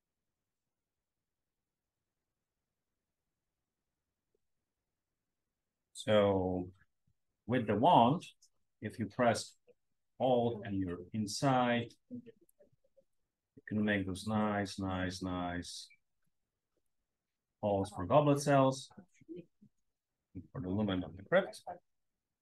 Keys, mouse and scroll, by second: 7.8 w, 9.4-12.2 scroll up 2, 12.6-13.9 alt+drag, 14.6-16.4 alt+drag, 16.8 alt+click, 17.8 alt+click, 18.3 alt+click, 19.0-20.7 alt+drag, 20.9 scroll up 1, 21.1-22.4 scroll down 1.